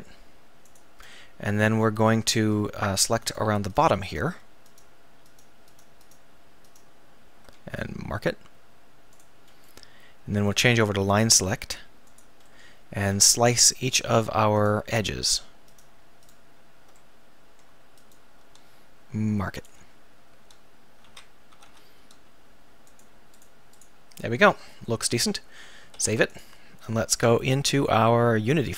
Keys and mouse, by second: 0.7 click, 1.1 middle click, 1.3 middle click, 1.9 click, 2.2-3.2 drag, 6.8 shift+right click, 10.1-12.5 drag, 12.5 middle click, 12.6 click, 13.1 z, 13.6 click, 13.6 middle click, 13.6 right click, 19.6-21.1 drag, 19.6-21.1 middle drag, 19.6-21.1 right drag, 21.1 z, 21.5 a, 21.7 a, 24.9 middle click, 26.0 ctrl+s.